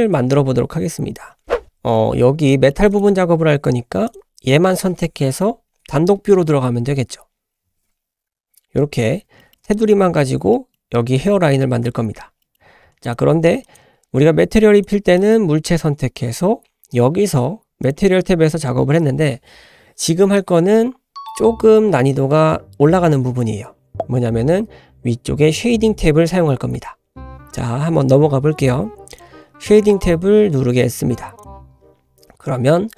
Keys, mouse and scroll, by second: 1.5 scroll up 6, 1.5-2.1 middle drag, 2.2 scroll up 1, 2.5-2.8 shift+middle drag, 2.9 click, 4.1 click, 8.3 /, 9.4 shift+middle click, 9.7 drag, 10.0-10.4 scroll up 2, 10.6 middle drag, 10.8 scroll up 1, 12.0 scroll down 2, 12.4 middle click, 13.0 click, 13.6 drag, 14.7 click, 15.3 drag, 17.8 click, 27.3 click.